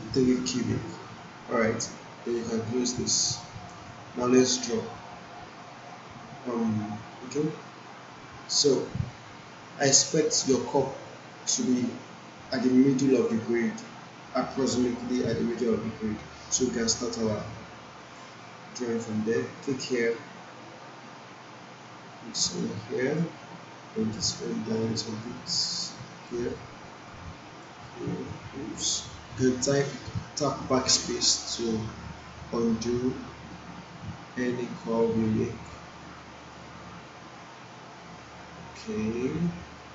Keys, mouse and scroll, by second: 18.0 click, 23.0 click, 26.1 click, 30.9 BackSpace, 33.0 BackSpace, 34.6 click, 39.6 click.